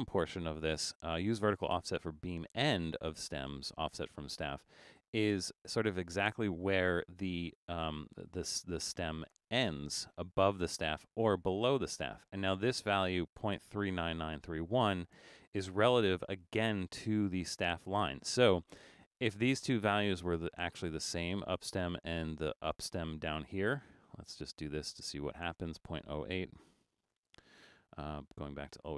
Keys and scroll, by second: 26.4-27.6 typing.